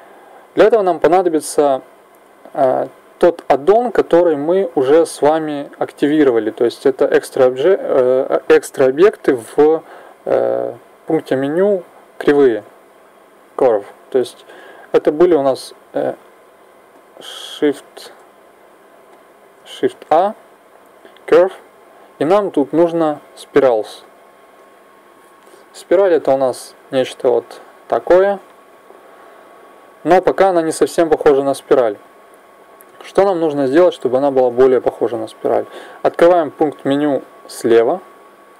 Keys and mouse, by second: 16.9-18.0 drag, 18.0 shift+s, 19.9 shift+a, 35.1-37.8 middle drag, 37.8 t.